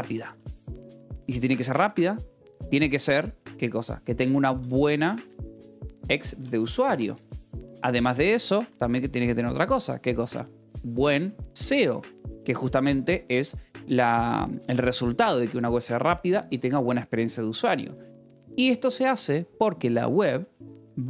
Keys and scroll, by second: 0.0-1.8 typing, 4.4-8.2 typing, 12.5 Escape, 18.1 :, 18.3 space.